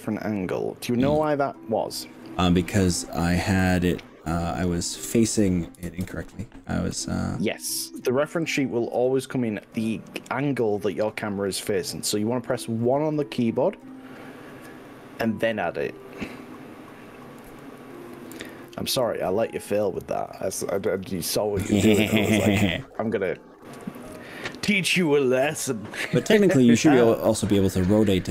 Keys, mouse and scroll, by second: 1.2 g, 3.6 middle click, 5.2 click, 6.0 ctrl+z, 6.9 middle click, 7.4-8.8 middle drag, 9.9 middle click, 12.6 r, 13.8 click, 14.4 click, 15.5 click, 16.0 click, 16.4 click, 17.5 ctrl+z, 17.8 ctrl+z, 18.2 ctrl+z, 18.6 ctrl+z, 19.0 ctrl+z, 19.4 ctrl+z, 20.0 ctrl+z, 20.2 ctrl+z, 20.4 ctrl+z, 21.0 ctrl+shift+z, 23.0 1, 24.2 KP_1, 25.0-25.6 scroll up 4.